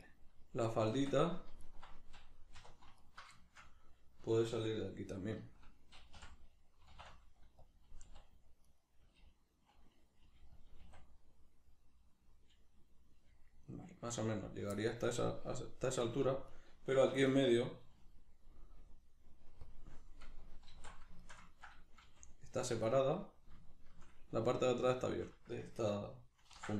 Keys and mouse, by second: 0.0 right click, 0.9 Tab, 1.6 alt+right click, 2.6 2, 3.0 alt+right click, 3.4-7.7 shift+middle drag, 6.1 o, 7.7 click, 8.1 s, 8.8 right click, 10.3 g, 10.7 click, 10.8 s, 12.3 click, 13.1 g, 14.5 click, 14.7-16.5 middle drag, 16.5 right click, 17.1 1, 17.3 right click, 19.7 click, 20.7 alt+q, 21.2-23.3 ctrl+shift+middle drag, 22.1 g, 23.3 click, 23.7-26.5 shift+middle drag, 26.5 ctrl+r.